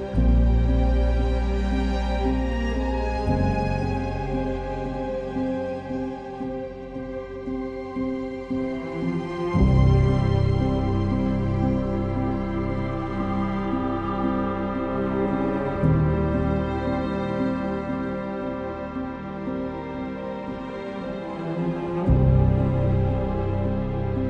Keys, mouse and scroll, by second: 0.6 ctrl+z, 10.9 ctrl+z.